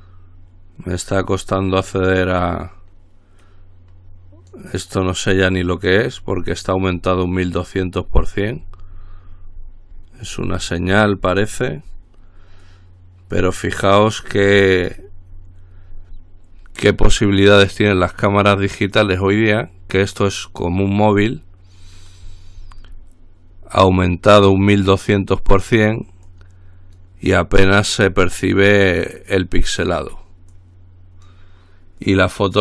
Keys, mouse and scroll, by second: 0.4-3.2 scroll down 1, 3.6-5.2 drag, 5.5-6.7 drag, 6.7-7.3 scroll down 1, 7.3-8.4 drag, 8.5-11.1 scroll down 1, 11.1-12.7 scroll down 1, 12.8-14.3 drag, 14.5-16.4 scroll down 1, 16.4-16.9 scroll down 1, 17.3-18.8 drag, 19.2-20.3 drag, 20.6-21.9 drag, 22.1-23.7 scroll down 1, 24.1-25.3 drag, 25.4-26.4 drag, 26.5-27.7 drag, 28.3 click, 29.5-30.6 drag, 30.7-32.0 drag, 32.2-32.6 drag.